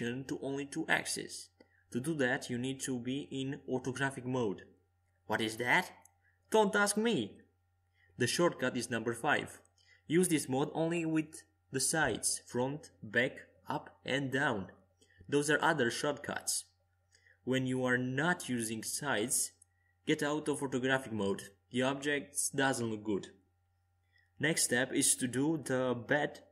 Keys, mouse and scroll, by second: 4.7 middle click, 8.3-10.6 middle drag, 12.6 KP_5, 14.0 KP_1, 16.3 KP_3, 19.4 middle click, 22.0-23.3 middle drag.